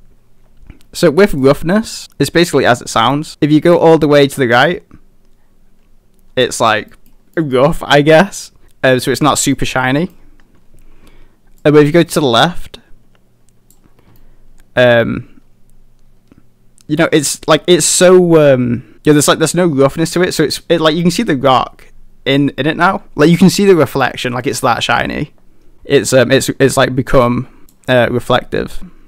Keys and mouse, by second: 1.5 click, 2.9 middle drag, 3.3-3.9 drag, 4.6-6.5 middle drag, 6.9 middle drag, 7.4 middle drag, 8.6-9.1 middle drag, 9.4 middle click, 10.0 middle click, 11.7-13.8 drag, 14.2-17.1 middle drag, 27.2 click.